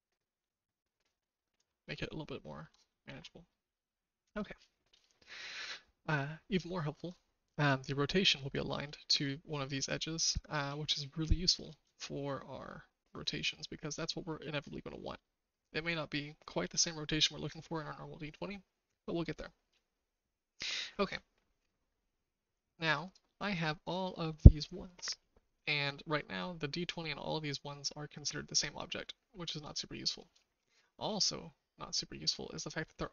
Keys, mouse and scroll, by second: 1.9-2.6 shift+middle drag, 2.6-3.0 shift+scroll up 1, 3.0 alt+z, 3.5 middle click, 3.9 shift+middle click, 5.0-7.0 shift+middle drag, 8.9 shift+middle click, 10.1 shift+middle click, 11.0-11.6 shift+middle drag, 11.8-13.9 shift+middle drag, 15.2-16.7 shift+middle drag, 23.1 click, 25.9-29.7 shift+middle drag, 26.1 typing, 30.4 shift+middle click, 31.1-32.2 shift+middle drag, 32.9-33.1 shift+middle drag.